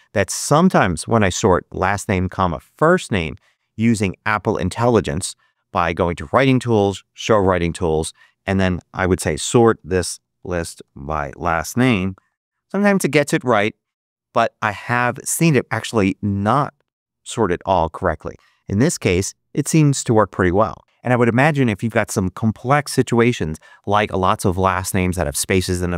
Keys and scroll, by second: 3.7 super+a, 8.6-12.7 typing, 12.8 Return.